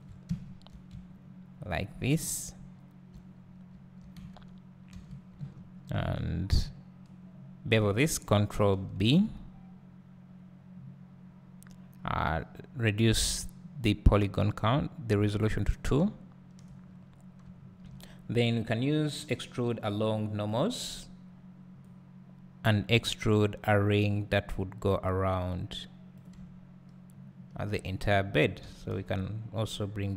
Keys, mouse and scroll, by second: 0.2 `, 1.7 alt+shift+click, 2.1 `, 3.4-3.7 scroll up 1, 8.9 ctrl+b, 17.0-17.4 scroll up 1, 20.5-22.3 drag, 26.4 `, 28.6 g.